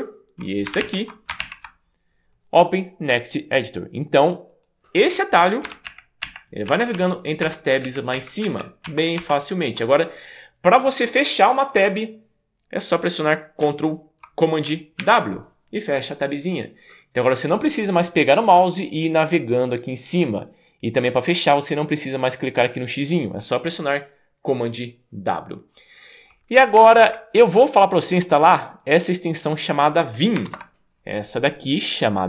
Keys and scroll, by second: 0.8 alt+super+Right, 1.4 alt+super+Right, 6.0 alt+super+Right, 6.7 alt+super+Left, 7.9 alt+super+Right, 8.9 alt+super+Left, 15.1 super+w, 26.8 Up, 27.2 Up, 30.5 super+BackSpace.